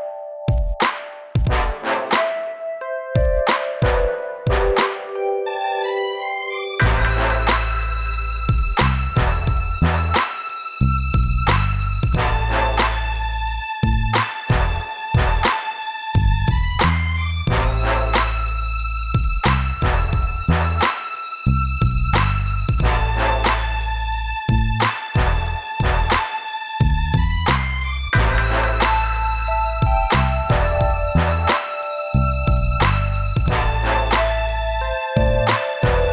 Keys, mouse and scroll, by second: 0.8 click, 1.0 click, 3.5 middle click, 4.8 click, 4.9 click, 5.9 click, 11.6 middle click, 13.7 click, 14.1 double click, 14.2 double click, 14.4 double click, 14.6 double click, 14.7 double click, 15.1 double click, 15.1 double click, 16.1 click, 18.3 click, 18.4 click, 18.8 click, 19.0 click, 22.2 e, 22.3 Return, 22.6 Return, 22.6 e, 22.8 Return, 24.5 Return, 24.7 click, 24.8 click, 26.0 click, 27.5 scroll up 1, 30.0 click, 33.2 click, 33.3 click, 34.8 click.